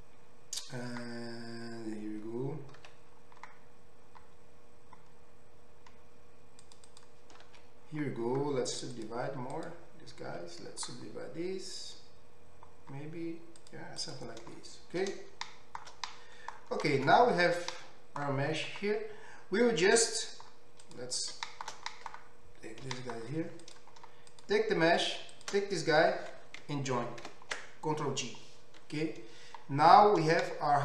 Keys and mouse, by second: 2.8 ctrl+r, 7.5 ctrl+r, 10.3 ctrl+r, 17.1 Tab, 17.7-20.0 middle drag, 20.5 middle click, 20.8 middle click, 20.9 click, 21.0 middle click, 21.9 click, 22.1-23.1 middle drag, 23.0 g, 24.0 middle click, 24.5 middle click, 25.4 shift+click, 25.9-28.9 middle drag, 27.4 ctrl+j, 29.7 middle drag, 30.0-30.8 middle drag.